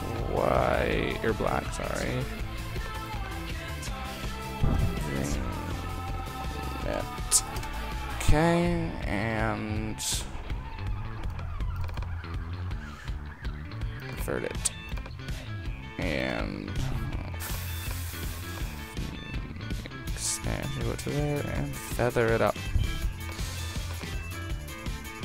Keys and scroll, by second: 4.7 shift+v, 7.6 Return.